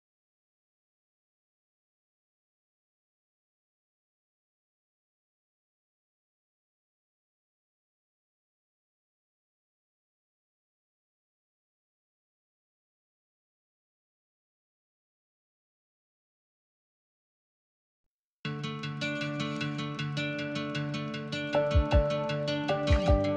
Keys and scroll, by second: 9.3 5, 14.2 BackSpace, 14.4 Return, 14.4 1, 16.5-17.0 typing.